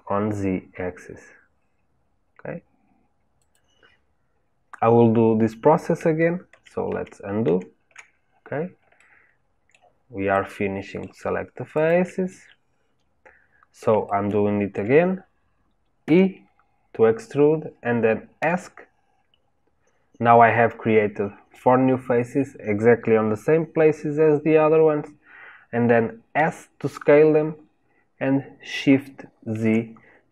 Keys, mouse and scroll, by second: 6.5 ctrl+z, 6.8 ctrl+z, 8.9-11.7 shift+middle drag, 11.7 shift+click, 12.2-16.0 middle drag, 16.0 e.